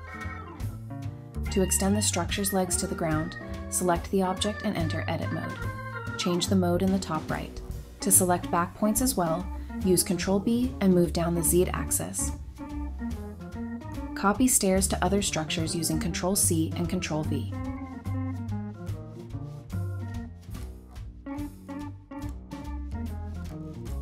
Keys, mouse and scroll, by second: 2.2-2.7 scroll up 1, 2.7 scroll down 1, 2.9 Tab, 3.4 typing, 7.4-9.4 typing, 9.7 middle click, 10.1 Tab, 10.3-10.8 scroll down 1, 12.2 middle click, 12.8-13.3 scroll down 1, 13.3 middle click, 13.5-14.1 scroll down 1, 14.1 middle click, 16.3-16.7 typing, 17.9-19.6 typing, 20.8 typing, 21.8 scroll up 1, 22.0-23.0 typing.